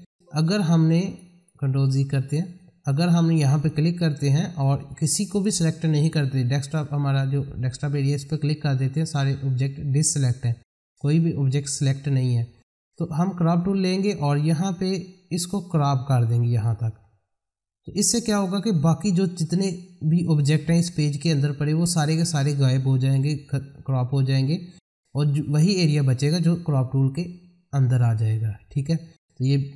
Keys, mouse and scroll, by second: 1.1 click, 1.7 ctrl+z, 2.2 click, 8.0 click, 13.6-18.0 drag.